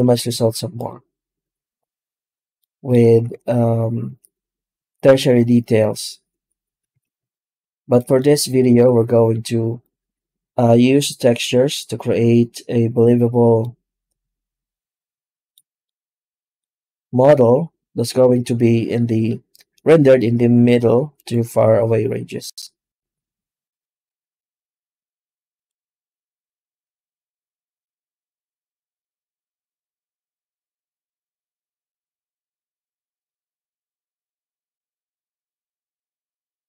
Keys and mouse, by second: 2.4 alt+middle click, 2.9 alt+a, 3.2 Tab, 3.9 Tab, 6.2 Tab, 6.8 alt+a, 7.1 z, 8.0-8.5 shift+middle drag, 8.7 z, 13.6-15.4 middle drag, 15.7-16.5 middle drag, 19.8 z, 26.7-34.7 drag, 36.4 z.